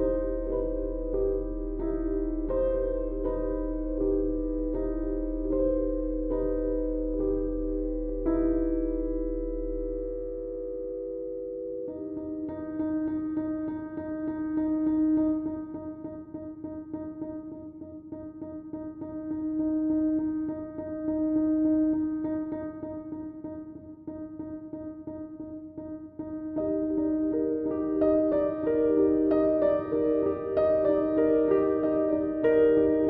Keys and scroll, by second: 3.8 3, 5.8 4, 6.4 3, 8.3 4, 8.7 3, 8.9 ], 10.0 4, 11.4 ], 28.2 2.